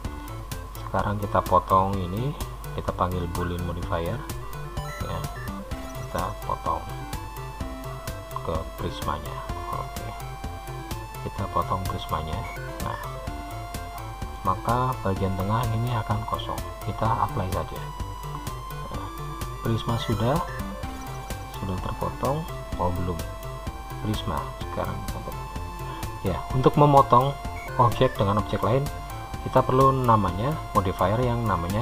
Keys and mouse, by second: 1.2-4.7 drag, 10.1-14.5 middle drag, 22.0-24.2 middle drag, 24.2-26.3 drag.